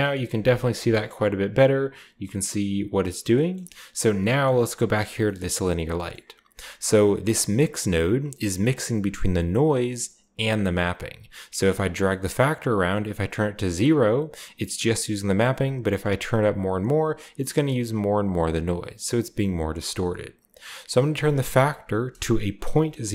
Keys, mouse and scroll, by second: 0.4-3.2 shift+scroll up 1, 3.5-4.2 middle drag, 4.4-7.0 middle drag, 4.7-6.1 drag, 5.0-5.9 scroll down 1, 5.9-7.0 scroll down 1, 7.0-8.1 drag, 8.7-9.8 drag, 10.3 click, 11.0 click, 11.8-13.7 drag, 13.9-15.6 middle drag, 13.9-15.6 scroll down 1, 15.6-17.1 drag, 17.9 click, 21.1 click, 22.6-23.1 typing.